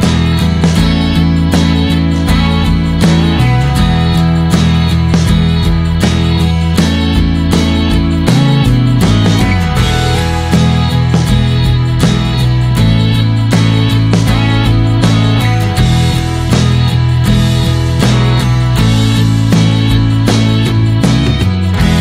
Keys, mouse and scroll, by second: 3.8 click, 4.5 n, 5.7-12.5 drag, 13.8 click, 13.9 middle click, 13.9 scroll up 1, 14.6 scroll up 1, 14.9-16.2 shift+middle drag, 16.2-16.7 scroll down 4, 16.6 middle click, 18.9-21.4 drag, 21.4-22.0 middle drag.